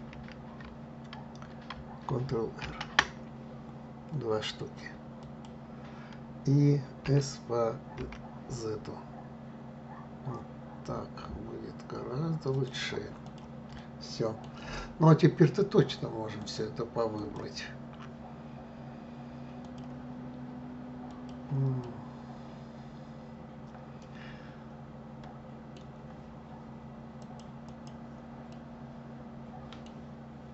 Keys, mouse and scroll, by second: 0.2 ctrl+z, 2.7 ctrl+r, 13.3 click, 13.8-16.5 middle drag, 16.5 click, 17.2-20.2 drag, 21.1 click, 21.8-26.9 middle drag, 27.2 click, 27.7 click, 28.5-30.5 middle drag.